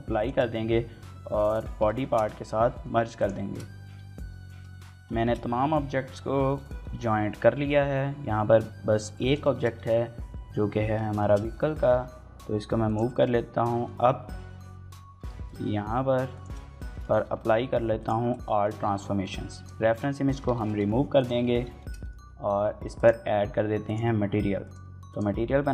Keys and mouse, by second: 0.0 ctrl+j, 0.2 shift+click, 0.5 ctrl+shift+a, 0.7 ctrl+j, 1.0 shift+click, 1.2 middle click, 1.4 shift+middle click, 1.7 ctrl+a, 2.1 click, 2.3 middle click, 2.4 shift+middle click, 2.5 right click, 2.7 shift+middle click, 2.8 click, 3.2 ctrl+a, 3.2 right click, 3.4 ctrl+j, 3.5 click, 3.6 right click, 3.8 Tab, 4.0 shift+middle click, 4.4 shift+middle click, 4.6 middle click, 5.0 shift+middle click, 6.6 shift+middle click, 7.3 middle click, 9.1 right drag, 9.1 g, 9.3 shift+middle click, 9.6 middle click, 10.2 KP_1, 11.0 shift+middle click, 11.5 g, 11.9 z, 12.7 click, 12.9 shift+middle click, 13.1 middle click, 14.2 KP_3, 14.9 g, 15.1 z, 16.1 shift+click, 16.7 shift+middle click, 17.0 ctrl+a, 18.2 middle click, 19.0 shift+middle drag, 19.4 click, 19.9 x, 20.3 shift+middle click, 20.6 middle click, 21.0 click, 21.6 shift+middle click, 21.8 middle click, 22.8 drag, 23.7 click, 24.9-25.7 shift+drag.